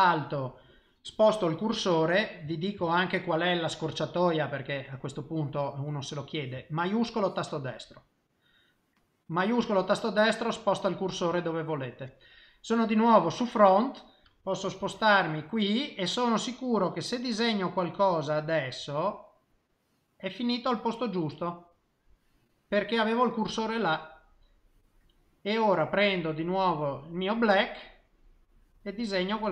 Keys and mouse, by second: 1.7 i, 2.8 shift+middle click, 7.4 shift+right click, 9.1 middle click, 10.9 middle click, 13.1 click, 13.8 middle click, 14.8 KP_3, 16.5 click, 19.9 middle click, 23.4 middle click, 26.7 click, 27.7 click, 29.0 click.